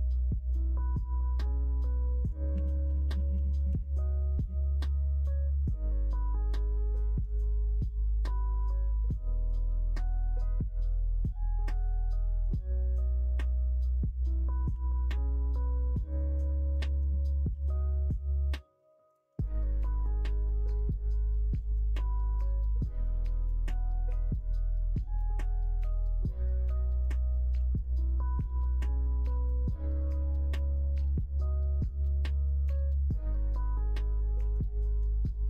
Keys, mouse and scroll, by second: 2.5 ctrl+z, 2.8 ctrl+z, 3.0 ctrl+z, 3.2 ctrl+z, 4.1 shift+click, 4.3 middle click, 5.2 e, 7.3 e, 11.3 e, 13.9 alt+click, 14.7 g, 16.7 click, 17.5 g, 20.3 g, 23.1 alt+click, 24.2 middle click, 24.5 e, 25.8 ctrl+z, 26.6 alt+click, 28.0 ctrl+e, 29.5 middle click, 30.0 middle click, 30.5 click, 31.6 e, 34.9 f, 35.2 middle click.